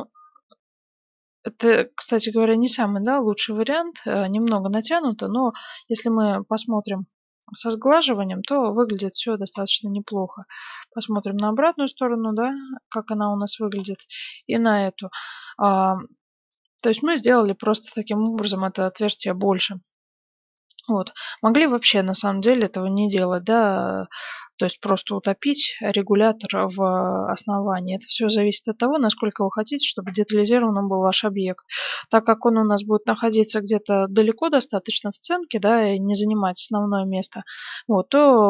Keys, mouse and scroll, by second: 4.0 middle click, 4.5 Tab, 6.6-8.4 middle drag, 9.7-13.1 middle drag, 13.8-16.0 middle drag, 16.1-19.0 middle drag, 19.8 z, 20.5-23.6 middle drag, 21.1 z, 26.2-29.4 middle drag.